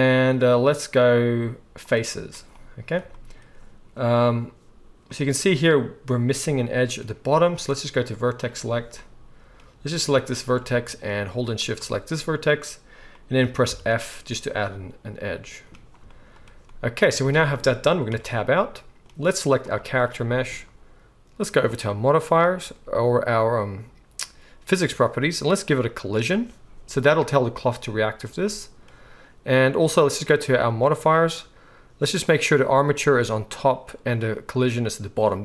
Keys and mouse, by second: 8.6-10.2 drag, 10.2-11.5 middle drag, 11.5 shift+click, 11.7-26.0 shift+middle drag, 13.6 f, 18.1 Tab, 26.0-30.8 drag, 30.8-32.9 middle drag, 32.9-35.4 drag.